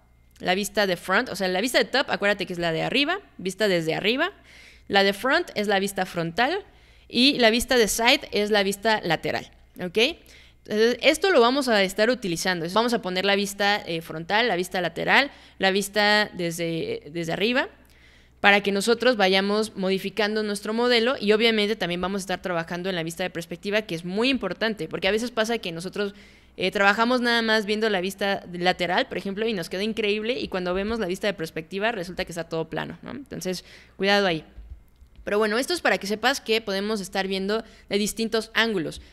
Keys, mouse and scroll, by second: 22.0 alt+click, 22.6 alt+middle click, 22.9 alt+right click, 23.4 alt+middle click, 23.7 alt+right drag, 24.0 alt+middle click, 24.3-24.9 alt+drag, 30.9-32.1 alt+drag, 34.7 alt+click.